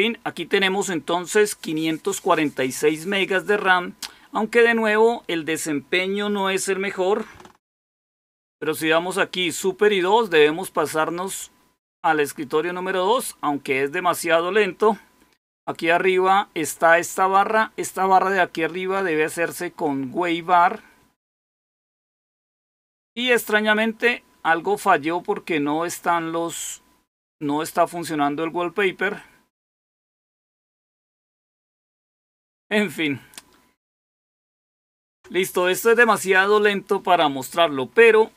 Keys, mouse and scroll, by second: 7.8 super+2, 34.8 super+1.